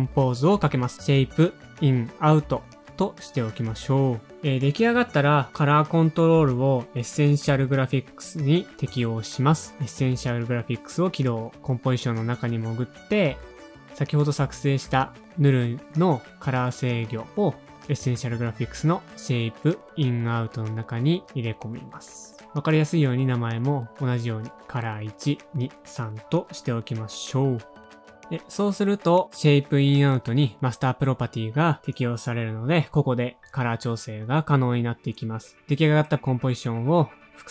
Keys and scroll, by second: 0.0 super+Up, 0.1 alt+], 0.4 shift+super+Down, 0.9 shift+super+c, 1.1-4.2 typing, 4.5 Home, 5.0 shift+Page_Down, 14.4 e, 24.1 typing, 24.6 super+a, 24.7 super+c, 25.4 super+v, 25.6 space, 25.9 shift+Left, 26.2 shift+Left, 27.3 super+v, 27.4 shift+Left, 27.6 shift+Left, 29.1 super+a, 29.7 space, 30.0 -, 30.7 Left, 30.9 ^, 31.0 space.